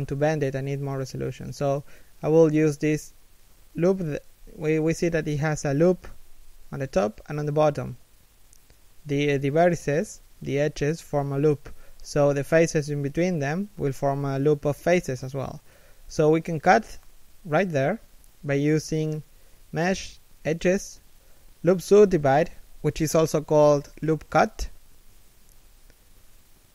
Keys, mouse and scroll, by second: 3.3 shift+middle click, 3.9 KP_3, 4.5 scroll down 1, 4.8 KP_1, 5.3 shift+middle click, 5.7 a, 6.1 middle click, 7.3 KP_3, 7.8 KP_1.